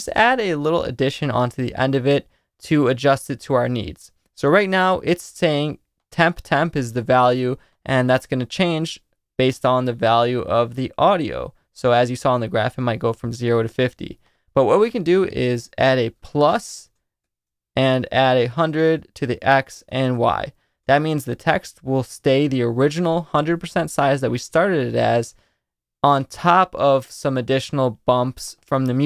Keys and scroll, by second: 15.8 space, 16.2 shift+=, 17.2-20.8 typing.